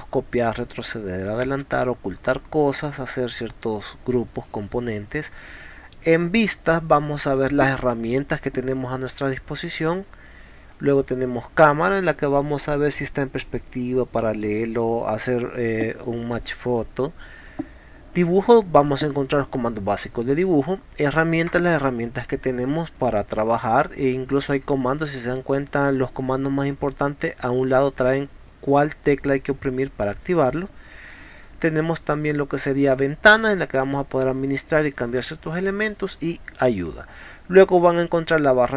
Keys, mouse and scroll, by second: 36.9 click.